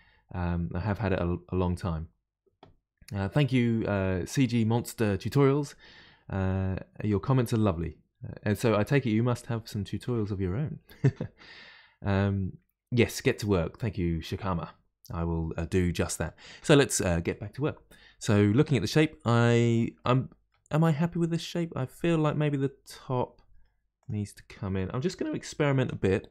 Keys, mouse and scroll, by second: 16.6-19.6 middle drag, 20.0 middle click, 20.7-21.1 scroll down 2, 21.1-24.0 middle drag, 24.0 click, 25.2 g.